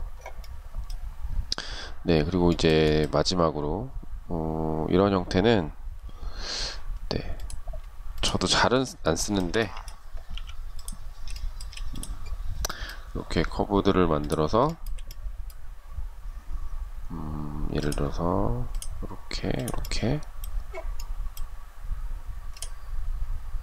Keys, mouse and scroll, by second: 1.7 shift+middle click, 7.4 shift+click, 7.9 shift+click, 8.3 shift+middle click, 9.5 m, 10.5 shift+middle click, 13.9 shift+middle click.